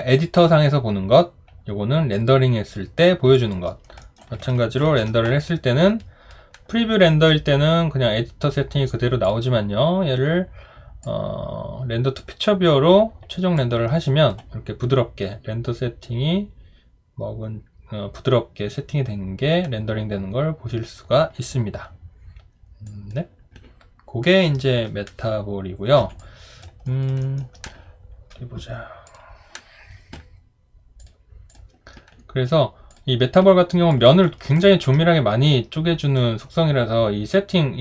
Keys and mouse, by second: 3.3 alt+click, 3.7 alt+right click, 4.0 alt+middle click, 4.8 ctrl+r, 26.2 alt+click, 26.8 alt+right click, 27.2 alt+middle click, 33.9 alt+click, 34.2 alt+right click, 34.6 alt+middle click.